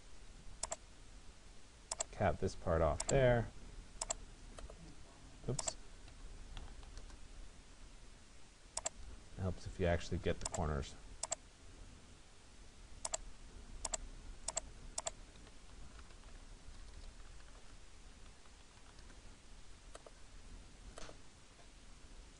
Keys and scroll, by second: 6.6 Return, 16.3 BackSpace, 17.4 n.